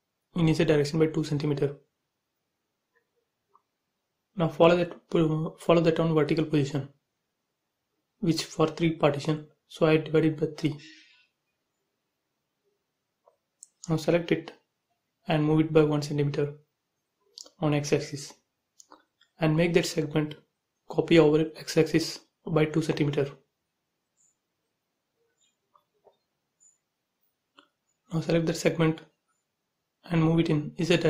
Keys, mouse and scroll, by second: 0.1-1.7 typing, 2.7 click, 4.6 m, 5.4 ctrl+click, 6.6 Right, 8.1 click, 9.0-9.9 typing, 11.4 click, 12.0 shift+click, 12.8 m, 13.1 click, 13.9 Right, 14.3-17.5 typing, 18.1 click, 21.3 m, 22.2 click, 23.3 Right, 24.1-25.8 typing, 26.5 click, 27.8 m, 28.5 ctrl+click, 29.1-30.1 scroll down 2, 30.1 Up, 30.7 6.